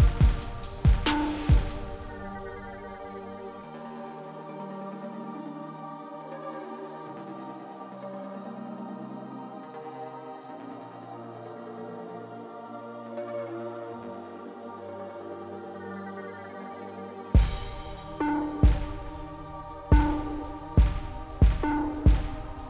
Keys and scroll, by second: 0.5-1.7 typing, 3.2 F9, 12.3 0, 16.5 0, 20.2 0.